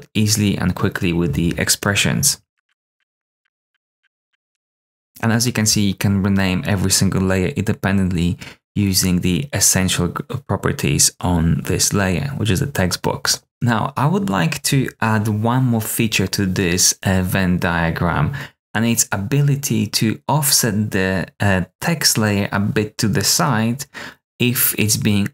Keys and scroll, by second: 2.5-4.2 typing, 2.6 super+f, 2.6 Return.